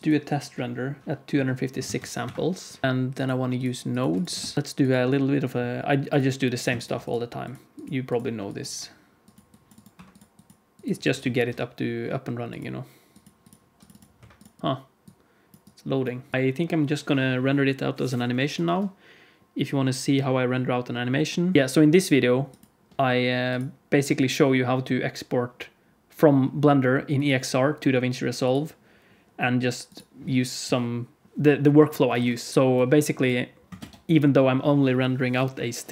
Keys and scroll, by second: 1.2 z, 1.8 ctrl+s, 2.3 F12, 4.3 ctrl+space, 4.5 shift+a, 11.2 shift+a, 14.6 alt+a, 14.6 ctrl+s.